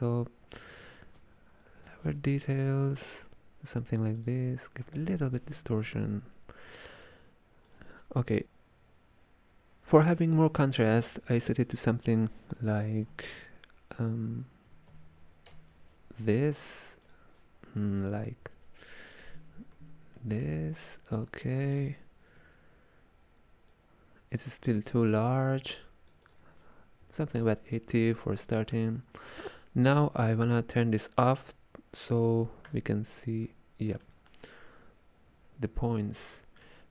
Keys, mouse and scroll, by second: 0.9-4.0 drag, 4.3-7.4 drag, 7.8 click, 14.9 KP_5, 17.1-20.1 drag, 20.2-23.8 middle drag, 23.8-28.7 shift+drag, 28.7-31.7 middle drag, 32.7 click, 33.5-36.9 middle drag.